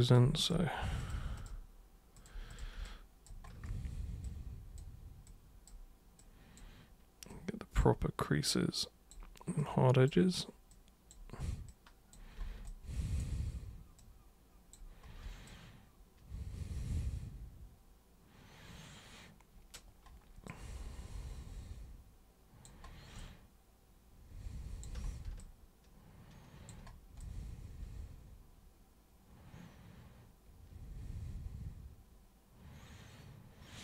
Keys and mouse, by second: 0.0 super+click, 0.4 shift+super+click, 1.0 super+click, 1.4 shift+super+click, 2.2 super+click, 2.5 shift+super+click, 2.8 alt+super+click, 4.3 super+click, 5.3 super+click, 6.2 super+click, 7.3 super+click, 8.5 click, 9.6 click, 10.7 click, 11.6 click, 12.6 alt+click, 14.0 click, 15.5-19.7 alt+super+drag, 20.4-22.6 alt+super+drag, 23.2-24.8 alt+super+drag, 25.4-26.7 alt+super+drag, 27.2-33.8 alt+super+drag.